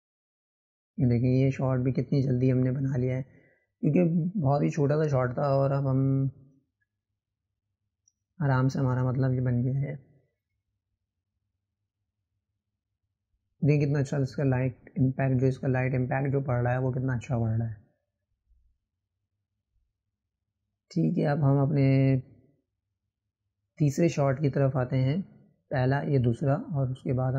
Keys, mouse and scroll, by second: 0.7 scroll up 1, 1.2-4.2 drag, 20.6 click, 24.1 click, 25.5 shift+Left, 25.8-27.3 right drag.